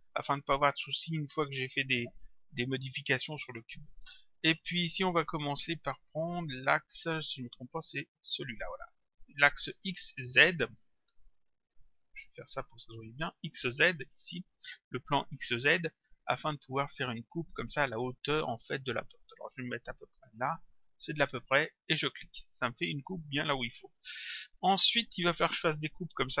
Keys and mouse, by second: 1.6 click, 5.8 click, 7.1 click, 12.0 click, 16.4 click, 21.9 click, 24.7 click.